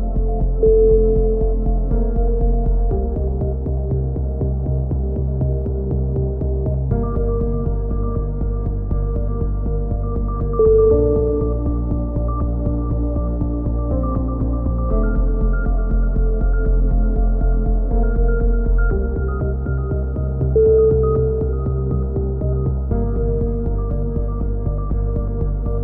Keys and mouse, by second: 1.3 a, 1.9-2.9 right drag, 2.7 s, 2.9 click, 3.0 right click, 4.9 click, 5.1-6.4 right drag, 5.9-7.0 drag, 7.8 click, 8.1 right click, 8.7 right click, 8.9 middle click, 9.6-10.6 drag, 10.6 s, 13.2 a, 13.4-14.5 middle drag, 14.1 c, 15.2 click, 15.5-16.6 middle drag, 16.6 click, 18.9-19.9 middle drag, 19.9-20.9 drag, 21.0 a, 21.8 right click, 22.9 right click, 23.8 e, 24.4 right click, 24.5 click.